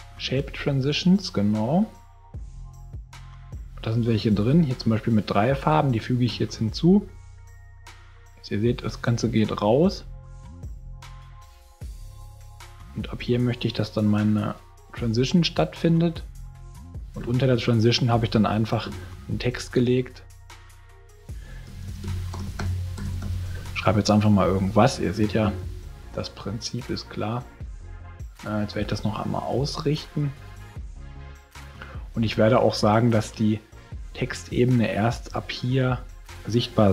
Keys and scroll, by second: 21.6-23.7 typing.